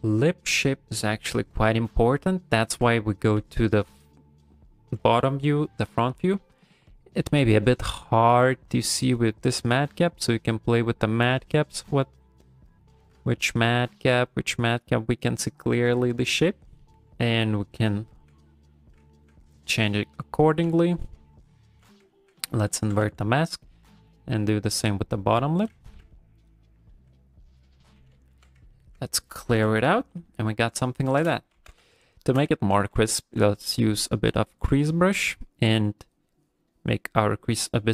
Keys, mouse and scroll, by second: 0.1 click, 0.4 click, 0.7 middle click, 1.0 middle click, 1.3 middle click, 2.2 middle click, 2.6 ctrl+middle click, 2.9 middle click, 3.4 f, 3.9 click, 8.1 click, 16.2 middle click, 16.8 ctrl+middle click, 17.0 click, 17.0 middle click, 17.0 g, 17.0 f, 17.4 click, 17.9 ctrl+middle click, 18.8 middle click, 19.1 ctrl+middle click, 19.4 middle click, 19.9 ctrl+middle click, 20.2 middle click, 20.6 a, 22.1 ctrl+middle click, 22.4 middle click, 22.8 g, 23.0 f, 23.3 middle click, 23.9 click, 24.2 click, 24.5 click, 24.7 click, 25.2 click, 25.5 click, 26.1 ctrl+middle click, 26.4 middle click, 26.9 ctrl+middle click, 27.2 middle click, 28.1 a, 28.7 ctrl+middle click, 29.5 KP_1, 30.4 ctrl+middle click, 30.9 ctrl+middle click, 31.5 shift+c, 32.2 shift+middle click, 32.5 ctrl+middle click, 32.8 f, 33.2 shift+middle click, 33.5 f, 34.0 click, 34.3 click, 34.6 click, 34.8 click, 35.1 click, 35.3 click, 35.7 click, 36.0 click, 36.4 click, 36.7 click, 37.0 click, 37.3 f, 37.7 click.